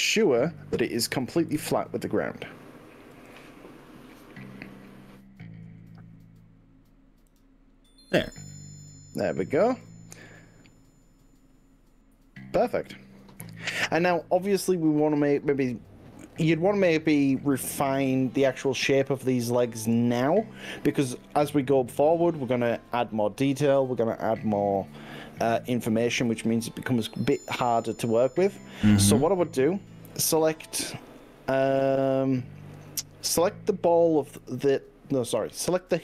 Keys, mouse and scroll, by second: 0.0 shift+middle click, 1.6 KP_1, 3.2 g, 7.4 click, 9.8 click, 10.2-17.6 middle drag, 18.7-27.0 middle drag, 27.0 drag, 27.8 middle click, 28.8-29.8 drag, 34.8 click, 35.6-36.0 middle drag.